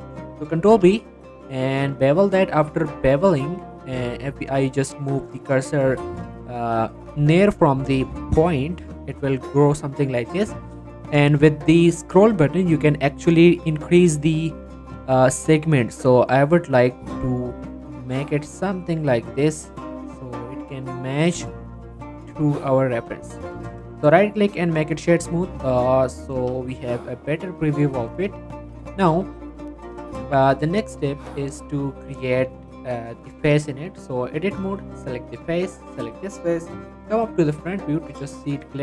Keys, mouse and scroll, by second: 0.7 ctrl+b, 12.5 ctrl+b, 13.7-14.2 scroll up 2, 18.6-20.4 scroll up 2, 21.1 click, 21.4 Tab, 21.7-22.9 middle drag, 22.9 scroll down 1, 23.1 middle click, 23.4 right click, 24.8 click, 25.2 middle click, 25.5 click, 25.7 middle click, 26.0 click, 26.4 g, 26.6 right click, 26.8-29.6 middle drag, 29.6 scroll down 1, 29.8 middle click, 31.3 click, 33.5 click, 37.2-37.6 scroll up 1, 37.8 shift+middle click, 38.2 scroll up 1, 38.5-38.8 shift+middle drag.